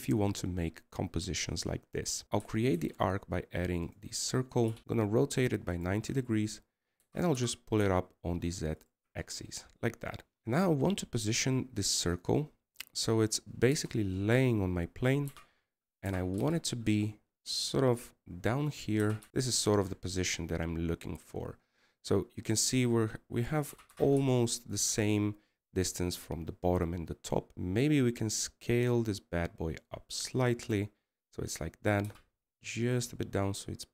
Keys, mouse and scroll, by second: 15.5 0, 16.9 scroll up 1.